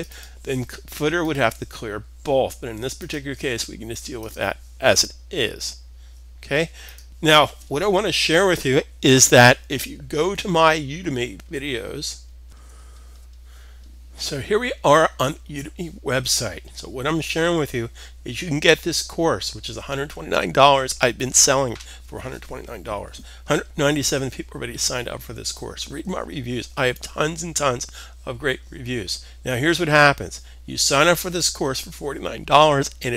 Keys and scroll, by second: 12.0 alt+super+Tab.